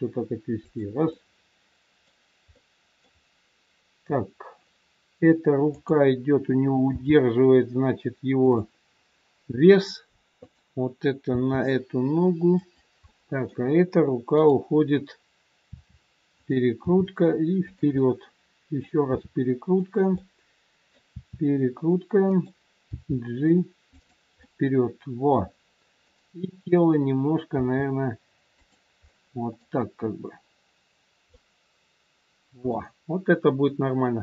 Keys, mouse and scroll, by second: 1.0 middle click, 5.7 click, 7.0 g, 10.3 click, 11.3 g, 14.4 middle click, 14.4 click, 15.6 r, 16.8 g, 17.9 middle click, 19.0 r, 20.1 middle click, 21.0 r, 22.9 g, 24.4 middle click, 26.0 click, 27.5 g, 29.0 middle click.